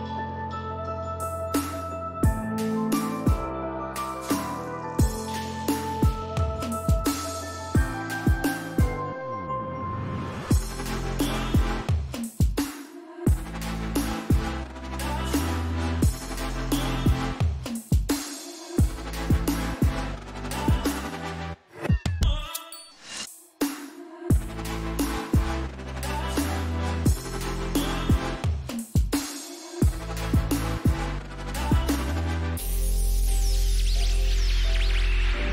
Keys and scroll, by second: 0.3 Up, 1.7 ctrl+t, 4.9 Up, 5.1 Right, 6.6 Left, 23.2 ctrl+z, 24.3 Down, 25.3 Up, 26.6 Up.